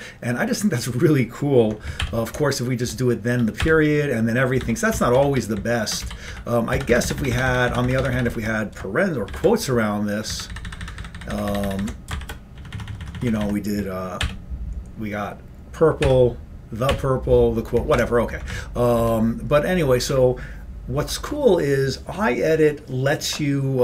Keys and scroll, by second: 2.1 ctrl+=, 3.7 ctrl+=, 4.7 ctrl+g, 5.0 ctrl+n, 5.2 ctrl+p, 5.4 ctrl+b, 6.0 ctrl+b, 6.1 ctrl+n, 6.4 ctrl+n, 6.8 ctrl+b, 7.0 ctrl+b, 7.1 ctrl+b, 7.3 ctrl+b, 8.2 ctrl+b, 9.4 shift+', 10.4 ctrl+f, 10.6 ctrl+f, 10.9 ctrl+f, 11.9 ctrl+f, 12.2 shift+', 12.7 Left, 12.8 Left, 12.9 Left, 13.1 Left, 14.3 ctrl+=, 16.1 ctrl+=, 17.0 ctrl+=, 17.9 ctrl+g, 18.0 ctrl+f, 18.5 Up, 19.1 Down.